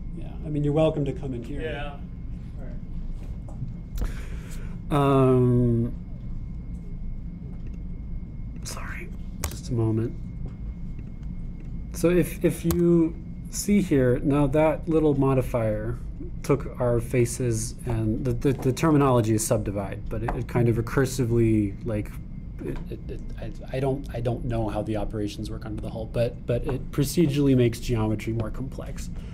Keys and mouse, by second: 10.5 Tab, 12.1-29.3 drag, 13.8 Tab.